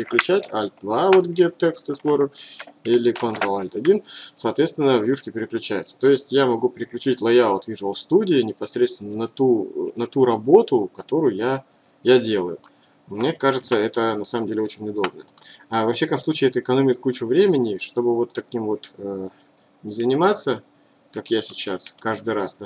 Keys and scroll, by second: 0.1 ctrl+alt+2, 4.3 ctrl+alt+1.